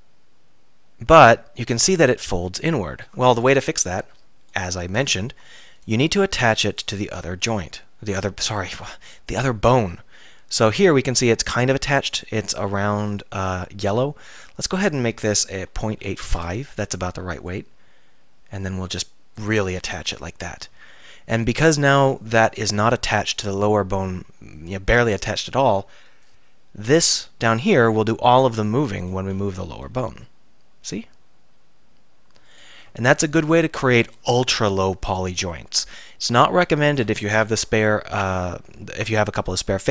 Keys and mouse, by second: 1.2 middle drag, 1.6 middle click, 4.6-5.8 middle drag, 6.8-7.5 drag, 8.5-10.4 drag, 10.4 middle click, 10.5 click, 10.6 middle click, 10.7 click, 10.8-11.6 middle drag, 14.3-20.1 drag, 20.1 KP_3, 29.1-30.9 drag, 29.9 r, 30.9-32.6 middle drag, 32.6-33.3 drag, 36.3-37.7 middle drag, 37.7 alt+r.